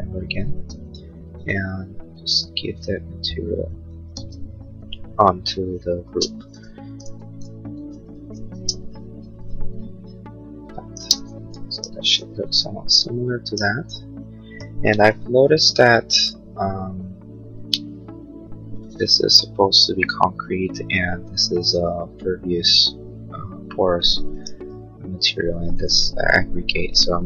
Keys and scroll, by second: 4.2 ctrl+z, 5.8 space, 6.2 ctrl+a, 6.7 b, 7.4 space, 7.7 Escape, 10.0 space, 10.4 Escape, 25.3 Return.